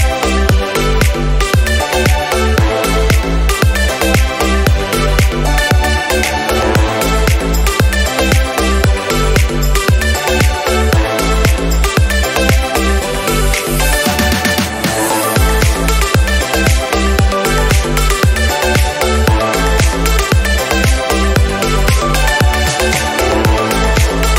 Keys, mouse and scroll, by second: 1.0 r, 2.8 r, 4.3 r, 5.5 click, 6.0 click, 6.4-6.8 scroll down 1, 7.0 click, 11.1 r, 12.2 click, 12.8-14.0 scroll up 2, 14.2 click, 15.8-16.7 scroll up 6, 16.7 g, 17.6 click, 18.5 click, 19.1 click, 20.0 click, 20.2 click, 21.5 click, 21.9 g, 23.0 click, 23.2 g, 24.0 click, 24.3 scroll down 1.